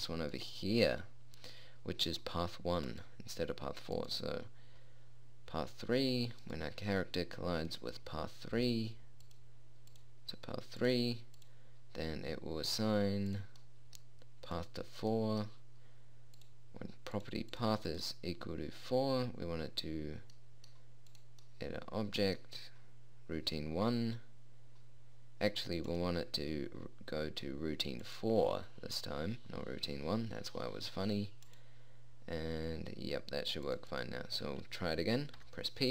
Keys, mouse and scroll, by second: 0.4-2.7 right drag, 2.7-4.5 middle drag, 4.5-6.1 right drag, 6.1 middle click, 6.9 right click, 7.8-9.1 middle drag, 9.8 click, 10.9 click, 11.5 click, 14.1-16.8 middle drag, 20.1 click, 21.7 click, 23.5-27.1 drag.